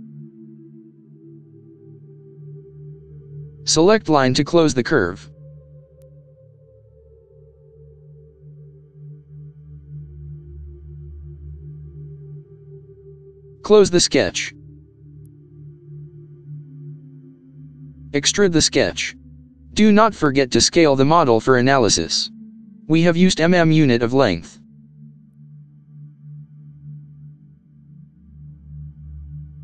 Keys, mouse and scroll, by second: 6.1 click, 10.1 middle click, 17.2-17.7 scroll down 2, 18.0 middle click, 20.8-21.7 scroll down 2, 21.7 middle click, 23.0 click, 23.9 middle click, 25.1 middle click, 25.8 middle click, 26.1 click, 26.1 middle click, 27.3 scroll, 27.7 middle click.